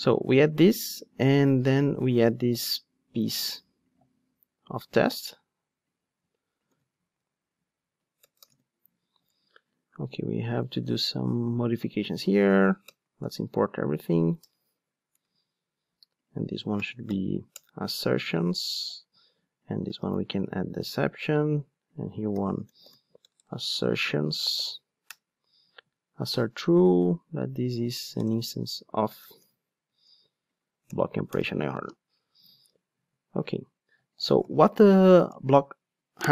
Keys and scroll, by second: 8.5 super+v, 10.6 alt+Return, 17.6 Return, 25.1 Return, 28.0 super+x, 30.8 alt+Return, 34.3 alt+super+l.